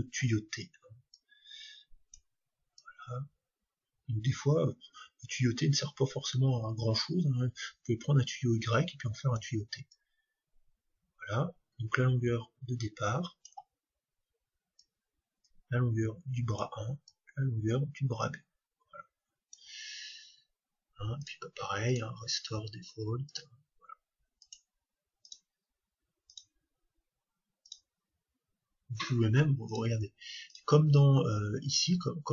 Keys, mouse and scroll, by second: 1.1-4.6 drag, 9.9-11.8 drag, 14.8-16.7 drag, 17.1-18.9 drag, 21.2-23.1 drag, 23.3-25.1 drag, 26.0-29.6 drag.